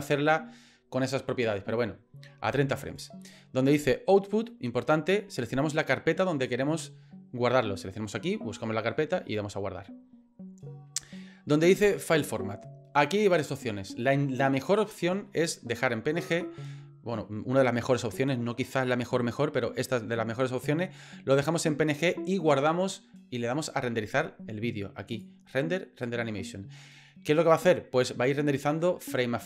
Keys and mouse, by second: 25.1-28.1 drag.